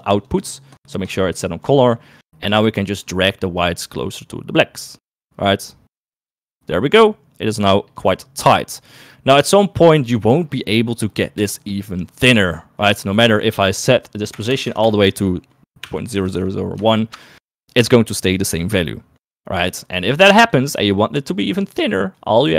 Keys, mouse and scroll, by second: 0.0 ctrl+shift+click, 0.3 ctrl+shift+click, 0.6 ctrl+shift+click, 0.9 ctrl+shift+click, 1.2 ctrl+shift+click, 1.5 ctrl+shift+click, 1.9 ctrl+shift+click, 2.8 middle click, 4.3-8.7 drag, 13.1-17.5 drag, 14.5 BackSpace, 14.7 BackSpace, 16.4 1, 20.7 click, 21.3 click, 21.8 click, 22.4 click.